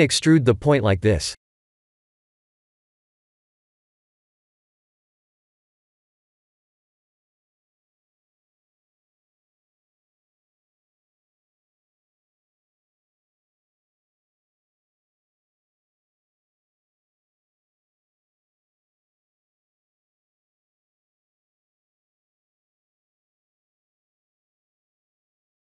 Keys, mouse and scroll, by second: 2.9 e, 4.1 e, 9.8 e, 11.2 e, 13.9 e, 15.3 KP_7, 16.2 g, 21.2 KP_1, 22.7 e, 24.8 e.